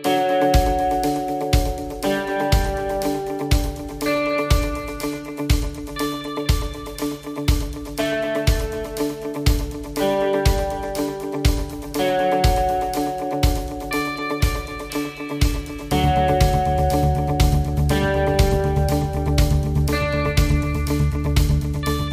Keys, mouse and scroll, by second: 0.8 middle click, 1.6 scroll up 1, 1.9 shift+middle click, 2.4-2.8 scroll up 2, 3.0 middle click, 6.9 click, 15.3 click.